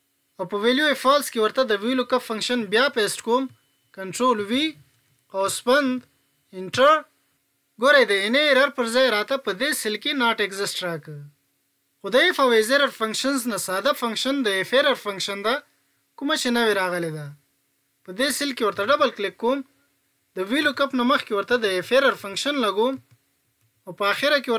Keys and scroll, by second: 3.9 ctrl+v.